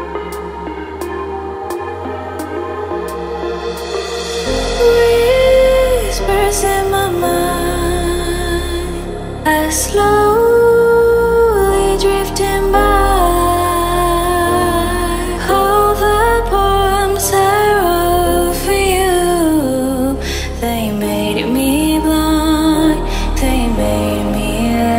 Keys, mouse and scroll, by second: 0.6 Tab, 2.4 KP_3, 3.6 click, 5.6 alt+click, 6.9 x, 8.8 click, 9.2-10.3 middle drag, 10.3 shift+click, 11.2 f, 11.6 middle click, 12.6 click, 13.0 f, 13.3 f, 13.7 f, 14.1 f, 15.5 alt+click, 16.4 f, 17.4 alt+click, 18.6 f, 20.4-23.5 drag.